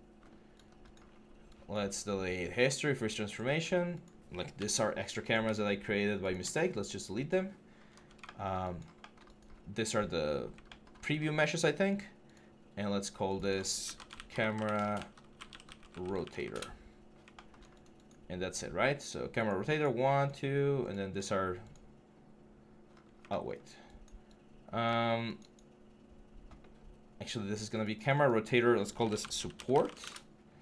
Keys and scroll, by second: 4.4 Delete, 5.2 Delete, 13.8-14.1 typing, 15.2-16.0 typing, 28.9-29.5 typing, 29.9 Return.